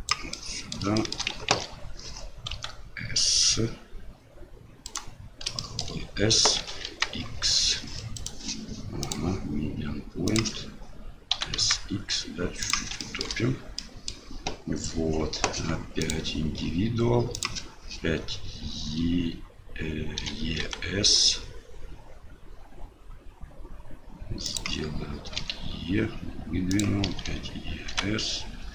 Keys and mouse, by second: 0.4 middle click, 1.0 shift+middle click, 1.5 ctrl+z, 2.5 s, 5.6 shift+middle click, 6.6 s, 9.2-10.4 drag, 13.1 shift+middle click, 13.9 middle click, 16.1-17.5 drag.